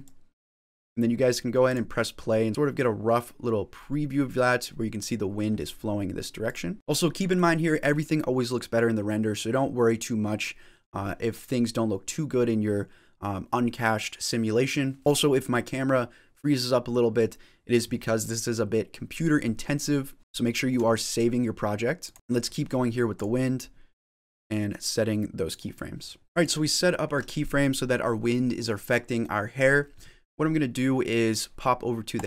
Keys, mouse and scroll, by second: 0.1 click, 1.5 click, 2.9-3.6 scroll up 8, 11.2 middle click, 18.1-18.8 scroll down 3, 18.6 middle click, 20.2 shift+middle click, 20.2 scroll up 5, 20.3 shift+middle click, 20.8-21.8 scroll down 1, 22.0 click, 22.3 middle click, 22.3 scroll down 4, 23.0 click, 24.2 click.